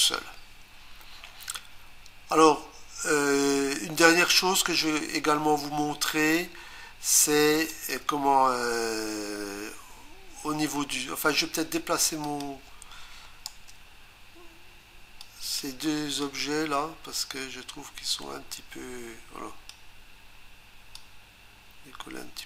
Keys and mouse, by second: 7.7 click, 12.2 click, 13.5 Return, 15.2 click, 16.2 click, 20.9 click.